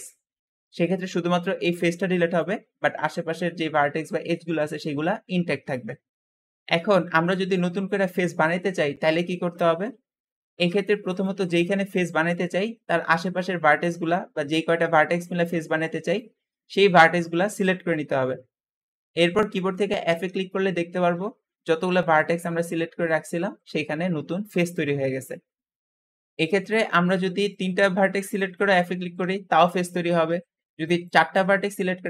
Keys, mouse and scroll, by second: 0.9 `, 6.5-7.7 drag, 10.9-12.2 drag, 13.6 shift+click, 15.9 shift+click, 17.3 shift+click, 19.9 f, 25.8 ctrl+z, 26.4 click, 27.3 shift+click, 28.1 shift+click, 28.8 f, 28.9 f, 29.9 ctrl+z, 30.1 ctrl+z, 30.9 shift+click, 31.9 f, 32.0 f.